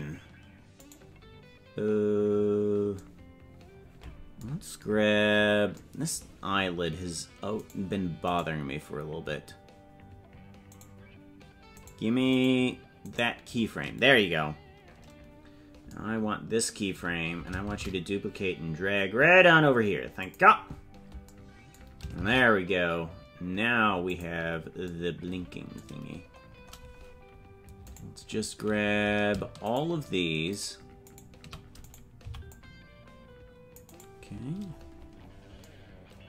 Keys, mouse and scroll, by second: 1.0 right click, 4.8-5.7 scroll down 16, 7.5 right click, 8.3-10.4 right drag, 10.7 right click, 11.7 right click, 12.3 right click, 13.1-15.8 right drag, 17.6 shift+d, 22.1 shift+d, 26.3-27.1 scroll up 17, 27.8 right click, 29.8 shift+right click, 30.7 shift+right click, 31.8 right click, 32.2 c, 34.7-35.6 scroll down 17.